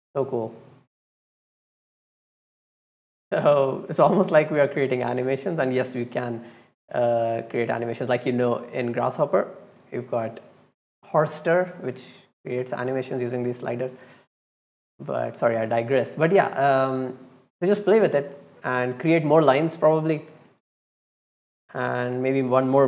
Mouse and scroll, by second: 0.1 click, 0.7 click, 0.8 click, 0.9 click, 1.4 click, 1.5 click, 1.7 click, 2.1 click, 2.2 click, 2.4 click, 2.6 click, 2.8 click, 2.9 click, 3.1 click, 3.3 click, 3.4 click, 3.6 click, 4.0 click, 4.4 click, 4.5 click, 4.7 click, 4.8 click, 5.0 click, 5.2 click, 5.3 click, 5.4 click, 5.6 click, 5.8 click, 5.9 click, 6.2 click, 6.3 click, 6.4 click, 6.6 click, 6.8 click, 7.0 click, 7.2 click, 7.3 click, 7.5 click, 7.7 click, 8.4 click, 9.7 click, 9.9 click, 11.8 click, 11.9 click, 12.2 click, 12.3 click, 12.4 click, 12.6 click, 12.8 click, 13.5 click, 13.7 click, 13.9 click, 14.0 click, 14.2 click, 15.0 click, 15.2 click, 15.4 click, 15.5 click, 15.9-16.9 middle drag, 17.0 click, 18.1 right click, 18.9-19.2 drag, 20.5-21.0 drag, 21.7 right click, 22.3 click.